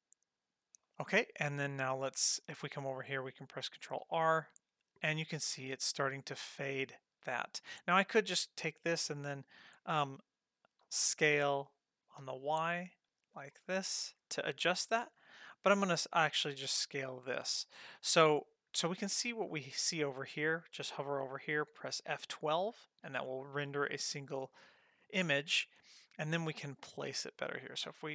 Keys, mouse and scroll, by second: 4.1 ctrl+r, 5.9 scroll up 1, 8.3 click, 10.8 s, 16.7-17.0 scroll up 2, 17.0-19.8 scroll down 2, 22.6 F12, 23.8-24.4 scroll up 3, 24.4-25.2 scroll down 1, 26.5 scroll down 1, 27.8 g.